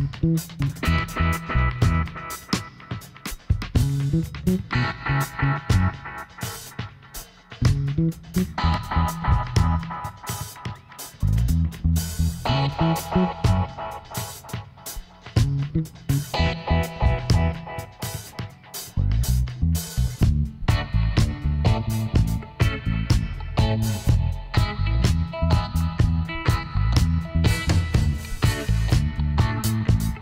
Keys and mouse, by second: 0.2 click, 0.8-1.9 middle drag, 1.9-3.2 right drag, 2.4 f, 5.7-7.8 middle drag, 8.4-10.2 drag, 9.5 z, 10.2 middle click, 11.1-13.0 right drag, 12.1 b, 17.9 x, 19.8-21.5 middle drag, 21.5-23.4 drag, 24.9-27.9 drag, 27.2 z, 27.9-29.2 middle drag.